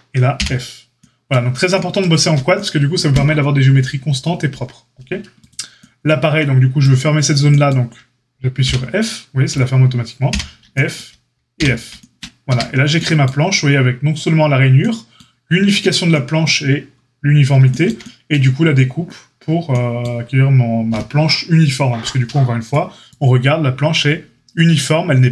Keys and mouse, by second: 0.3 f, 8.6 f, 10.2 f, 11.5 f, 12.4 Tab.